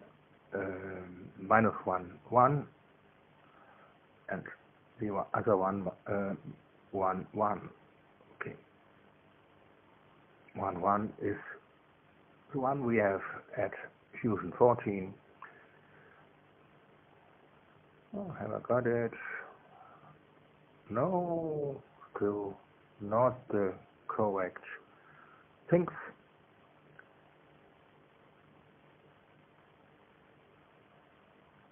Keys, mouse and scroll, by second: 3.7 click, 4.7 click, 5.7 1, 6.0 Tab, 6.3 0, 13.0 Up, 13.3 Up, 14.1 Down, 14.3 Down, 16.1 click, 17.1 -, 17.7 1, 18.7 Return, 20.1-26.1 drag, 28.0 click, 29.3 click, 29.7 space, 31.1 scroll up 2, 31.6 scroll down 2.